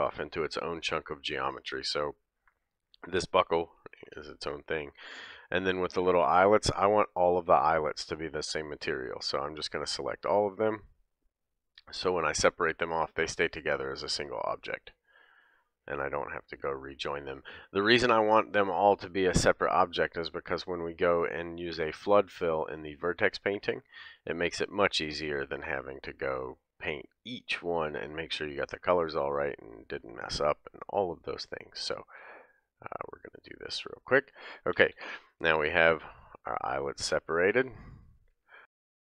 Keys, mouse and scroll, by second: 0.9 scroll up 1, 3.9 p, 6.0 click, 7.1 l, 8.6 l, 9.6 l, 10.8 l, 12.4 l, 14.2 l, 16.1 l, 17.2 l, 18.4-20.1 middle drag, 18.4 l, 19.5 l, 20.2-31.2 middle drag, 21.9 l, 23.0 l, 24.2 l, 25.2 l, 26.9 l, 28.0 l, 29.7 l, 30.8 l, 33.0 l, 35.4 l, 35.4 p, 37.4 click, 38.4-39.1 typing, 38.8 middle click, 38.9 scroll down 2, 39.0 scroll up 1.